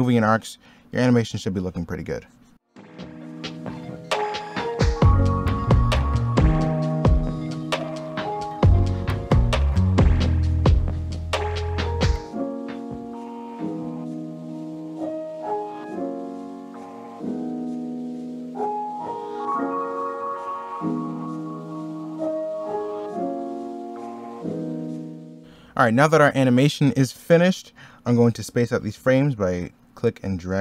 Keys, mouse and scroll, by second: 0.8 middle click, 1.9 e, 2.6 b, 2.7 ctrl+z, 3.0 e, 3.2 ctrl+z, 3.4 ctrl+z, 3.7 scroll up 1, 4.0 ctrl+z, 4.5 ctrl+z, 5.3 middle click, 6.3 e, 6.6 b, 6.7 e, 6.8 b, 7.4 ctrl+z, 7.7 ctrl+z, 7.8 middle click, 8.4 middle click, 8.6 ctrl+z, 9.1 ctrl+z, 9.9-11.3 typing, 11.0 middle click, 11.5 ctrl+z, 11.9 ctrl+z, 12.4 x, 12.8 middle click, 12.9 s, 15.7 middle click, 15.9 b, 16.0 ctrl+z, 16.4 x, 16.5 middle click, 16.6 x, 16.7 z, 18.1 z, 18.2 x, 19.5 ctrl+z, 19.9-21.7 typing, 21.0 middle click, 24.6 x, 24.9 z, 25.3 x, 25.4 z.